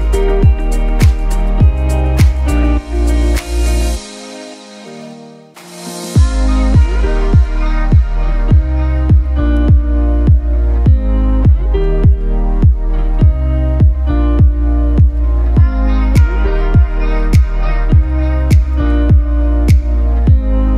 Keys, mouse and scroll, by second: 1.0-4.3 typing, 1.1 click, 3.4 click, 3.7 click, 4.3 click, 9.7 click, 10.7 typing, 12.3 typing, 13.2 click, 14.1 ctrl+z, 15.2 click.